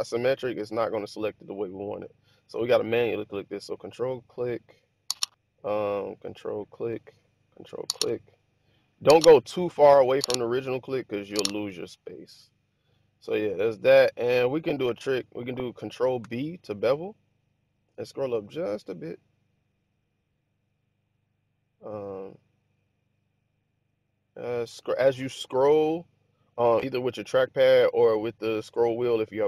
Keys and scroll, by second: 16.1 ctrl+b.